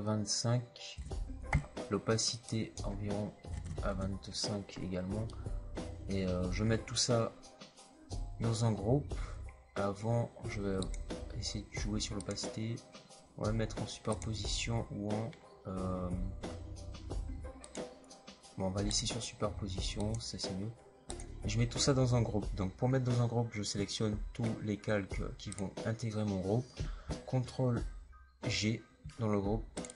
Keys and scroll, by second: 3.4 KP_2, 3.6 KP_5, 5.0 typing, 28.4 ctrl+g.